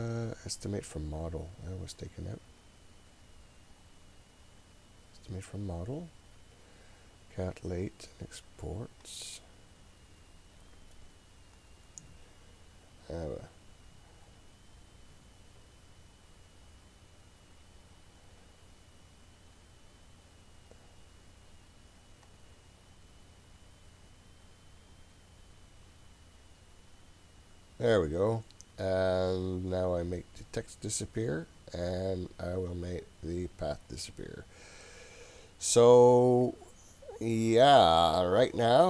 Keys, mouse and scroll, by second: 3.9 click, 9.1-20.8 drag, 22.3-26.8 drag, 30.5 click, 34.0 click, 34.8-38.8 middle drag.